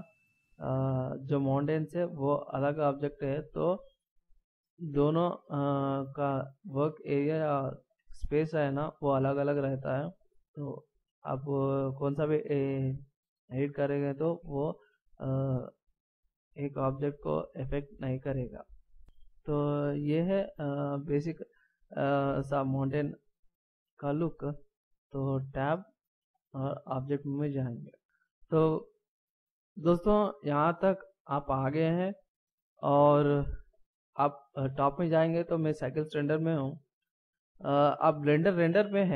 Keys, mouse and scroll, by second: 5.2 g, 6.5 middle click, 8.3 g, 11.9 middle click, 14.9 right click, 16.3 g, 18.5 right click, 19.0 middle click, 21.3-21.7 scroll up 2, 21.9 scroll down 1, 23.5 middle click, 25.5 Tab, 36.2 click.